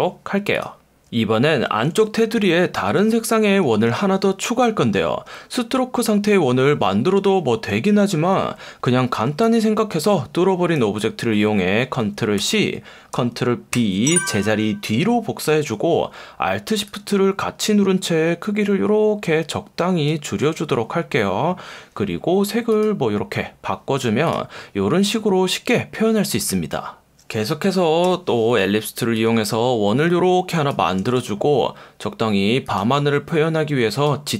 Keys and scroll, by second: 1.9 F1, 3.9 F1, 12.3 super+c, 13.7 super+b, 28.0 l.